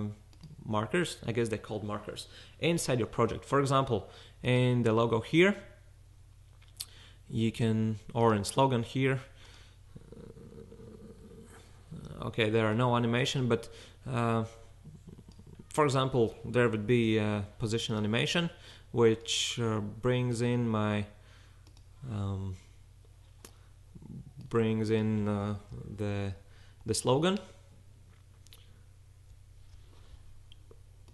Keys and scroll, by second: 11.2 s, 17.0 p, 25.9-26.9 shift+fn+Right, 26.4 Right, 27.0 Right, 27.2 Right, 27.4 Right, 27.5 Right.